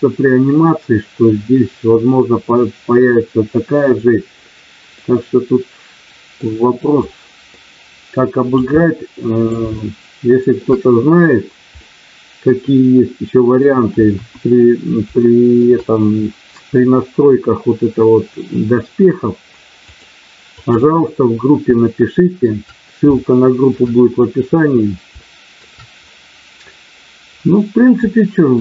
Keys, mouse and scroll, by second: 4.9-6.4 middle drag, 7.0-8.5 drag, 8.7 middle click, 9.6 shift+middle click, 11.7-13.6 middle drag, 14.1 KP_1, 15.1 middle click, 19.7 click, 21.9 shift+middle click, 23.2 shift+middle click, 25.2 shift+middle click, 28.0 shift+middle click.